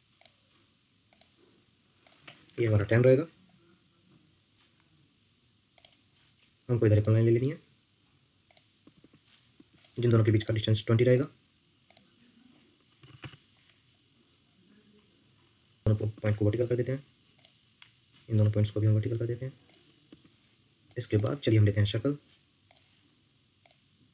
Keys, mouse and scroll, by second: 2.3-3.1 typing, 8.8 Escape, 9.0 Escape, 9.5 Escape, 12.7-13.6 typing, 15.8 shift+click, 16.1 Escape, 18.3 shift+click, 20.1 Escape.